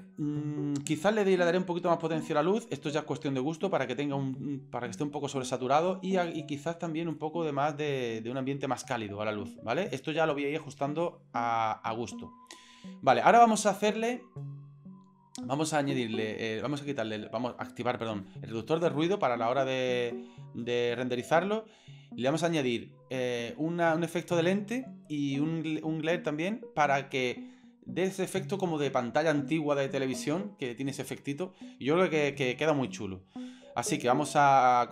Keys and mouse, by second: 0.0 right click, 2.0-3.7 drag, 6.2 click.